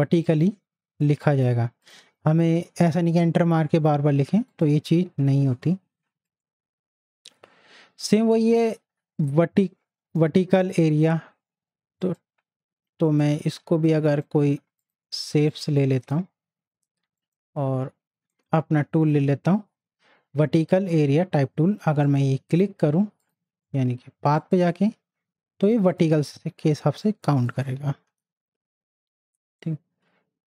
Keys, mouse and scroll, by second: 4.5 click, 6.3 right click, 12.0 right click, 13.2 click, 14.1 right click, 14.8-17.2 drag, 17.2 right click, 20.9-30.4 drag, 29.4 right click.